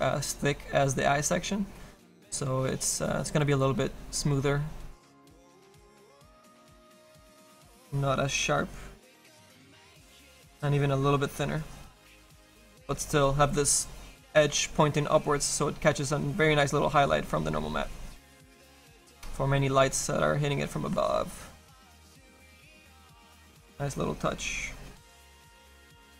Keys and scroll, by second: 9.2 s, 23.0 s.